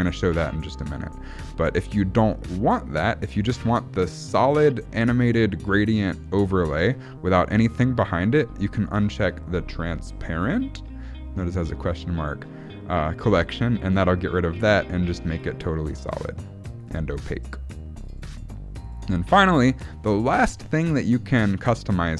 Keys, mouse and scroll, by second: 13.4 click, 15.5 click, 16.1 click, 16.9 click, 18.1 click, 18.9 click.